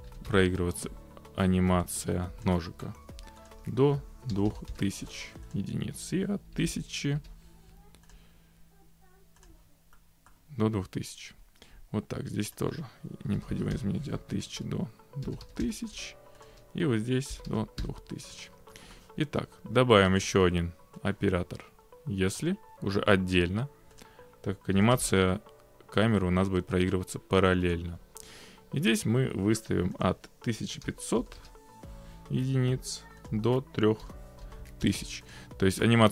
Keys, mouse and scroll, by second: 0.1 ctrl+c, 2.5 click, 3.6-4.4 typing, 5.6 click, 5.8-6.6 typing, 8.2 click, 9.5 click, 10.3 middle click, 12.6 click, 12.7-15.3 typing, 14.5 click, 16.3-17.3 typing, 16.5 click, 18.4 click, 19.0-19.4 scroll, 20.2 click, 22.4 click, 24.0 click, 24.8 ctrl+c, 27.7 click, 30.1 click, 30.4-31.8 typing, 33.3 click, 34.1-34.5 typing, 35.4 click, 35.9 middle click.